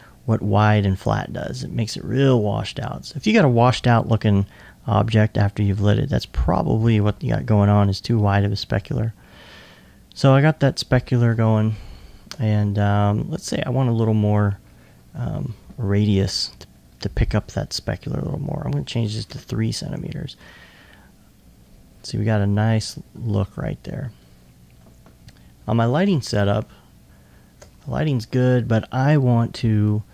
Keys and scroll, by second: 19.3 Tab.